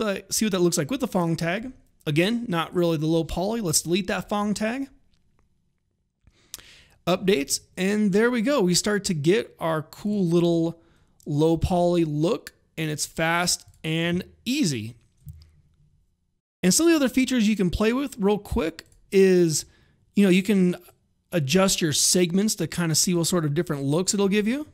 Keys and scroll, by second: 3.5 Delete, 10.3 r, 24.2 alt+r.